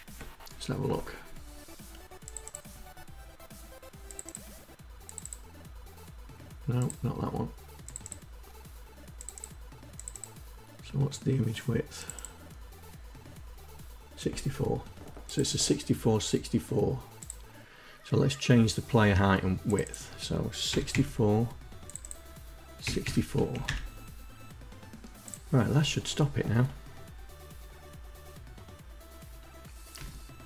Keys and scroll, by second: 20.1 KP_6, 20.4 KP_4, 22.3 KP_6, 22.5 KP_4, 23.0 Down, 23.2 Up, 29.4 Down.